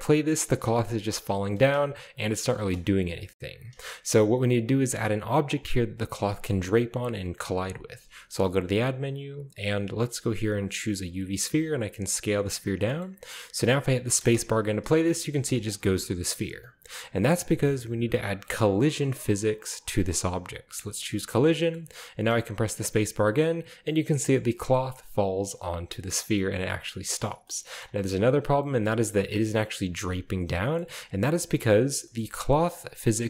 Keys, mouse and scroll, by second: 0.5 space, 0.7 click, 1.5-1.8 scroll up 1, 1.8 scroll down 1, 2.0-3.2 middle drag, 2.4-2.8 scroll down 1, 3.2 click, 4.1-5.0 scroll up 1, 6.4 shift+middle click, 8.0 shift+a, 10.6 click, 11.4 s, 12.3-13.0 drag, 13.0-14.2 shift+middle drag, 14.2 space, 15.3 space, 15.6 click, 21.1 click, 21.6 middle click, 22.1 space, 23.3 middle click, 24.2-24.8 drag, 25.5 middle click, 26.0 click, 26.9-28.4 scroll down 1, 27.3 middle click, 28.6-29.4 drag, 29.3 typing, 29.4-30.2 middle drag, 30.6-32.8 shift+middle drag, 31.2-31.6 shift+right drag, 31.8-32.8 shift+scroll up 2.